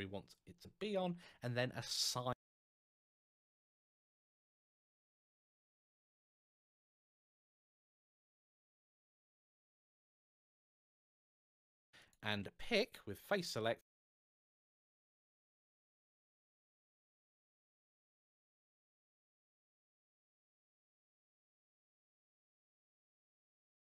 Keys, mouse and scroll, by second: 0.4 shift+scroll up 2, 10.5 alt+Tab, 11.7 alt+click, 12.6 click, 12.6 click, 13.3 alt+click.